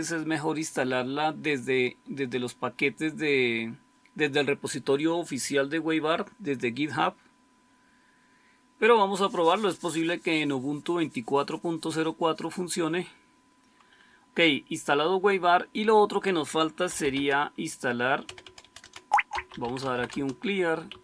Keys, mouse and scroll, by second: 16.6-21.0 typing.